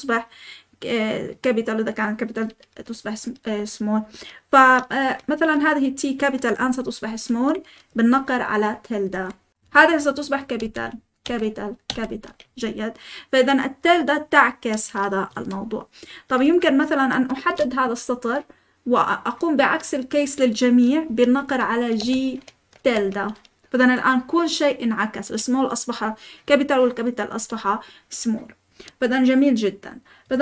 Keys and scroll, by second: 4.9 typing, 8.8-11.8 typing, 15.2 Escape, 16.0-17.4 typing, 21.9 g, 22.7 ~.